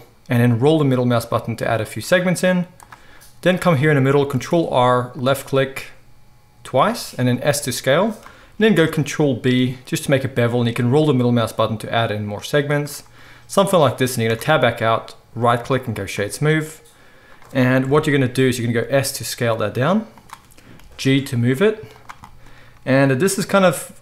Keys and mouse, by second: 4.0 ctrl+click, 4.3 ctrl+r, 7.3 s, 8.6-11.7 ctrl+drag, 8.7 ctrl+b, 11.7-15.5 middle drag, 14.2 Tab, 15.5-17.3 right drag, 17.3-18.7 middle drag, 17.8 KP_7, 18.7-24.0 right drag, 18.8 s, 20.7 g.